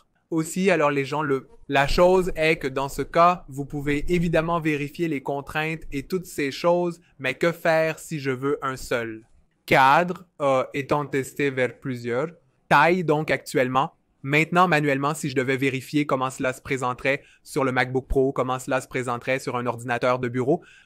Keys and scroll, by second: 3.1 v, 5.8 super+z.